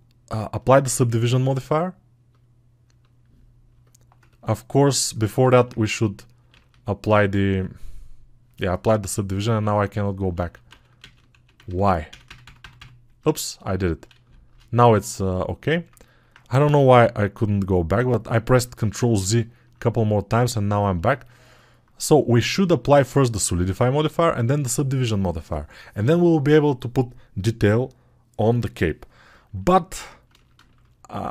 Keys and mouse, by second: 5.5-13.1 ctrl+z, 14.4 ctrl+z, 19.5-29.5 drag, 29.5-31.3 alt+right drag.